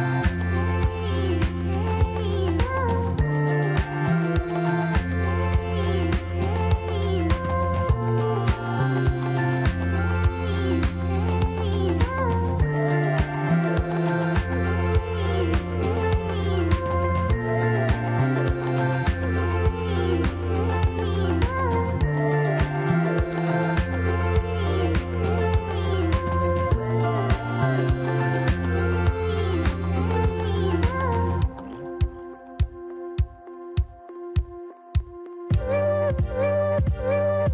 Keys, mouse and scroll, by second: 0.7 g, 2.7 s, 4.2 shift+z, 4.7-5.1 scroll down 1, 5.1-6.0 middle drag, 6.0-6.5 scroll up 2, 7.0 click, 9.5 drag, 10.3 click, 10.6 Tab, 11.2 middle click, 11.9-12.3 scroll up 1, 12.3 shift+middle click, 12.9-13.3 scroll up 2, 14.8 click, 16.6 click, 18.4 middle click, 19.3 ctrl+click, 20.6 ctrl+click, 22.0 shift+click, 23.1 shift+click, 24.2 shift+click, 25.2 shift+click, 25.8 shift+click, 26.8-27.3 scroll down 1, 27.3-29.2 middle drag, 29.2 KP_1, 32.3 middle click, 33.2-34.8 scroll up 4, 34.8 shift+click, 36.2 alt+shift+click, 36.8 alt+shift+click.